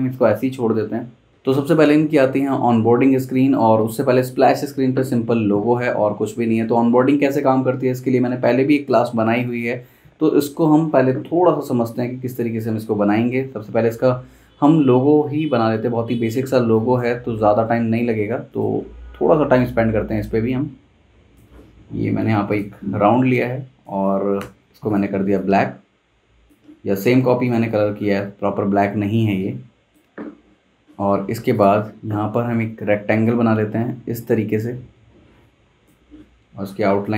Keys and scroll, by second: 16.6 space, 22.9 v, 24.4 i.